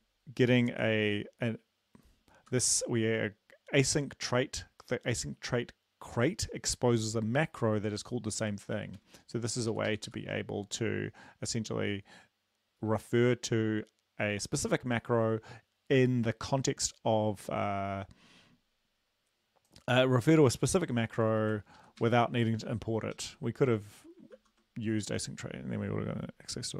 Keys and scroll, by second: 2.3 Left, 9.1 ctrl+Right, 9.8 ctrl+shift+Left, 9.9 ctrl+shift+Left, 10.1 ctrl+shift+Left, 21.8 ctrl+Left, 22.0 ctrl+shift+Right, 23.2 ctrl+x, 24.4 ctrl+z.